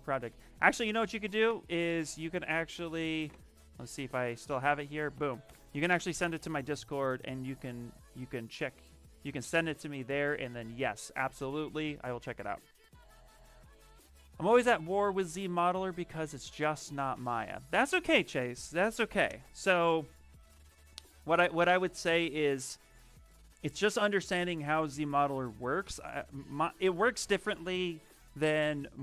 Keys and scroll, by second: 0.4 Caps_Lock, 0.9 t, 4.4 ctrl+v, 5.3 Return.